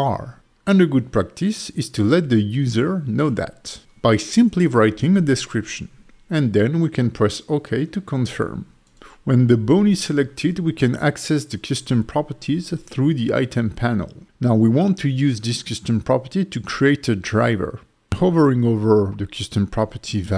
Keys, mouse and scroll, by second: 11.8 n, 13.4 click, 14.7 click, 15.4 click.